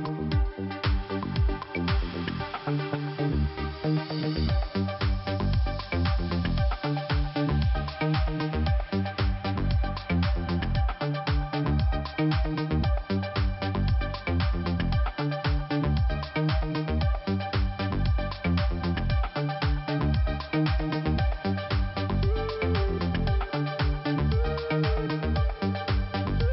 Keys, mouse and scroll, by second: 2.7 shift+p, 4.6 click, 7.4 click, 11.6 shift+f, 12.7 click, 14.1 scroll down 2, 18.2 click, 22.2-22.6 scroll up 1, 26.1 click.